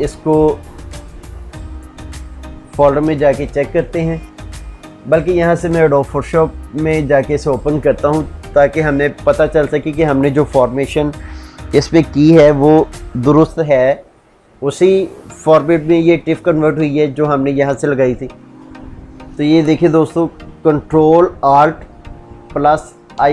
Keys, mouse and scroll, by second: 2.8 ctrl+o, 4.7 Escape, 6.7 click, 19.7 click, 22.9 ctrl+alt+i.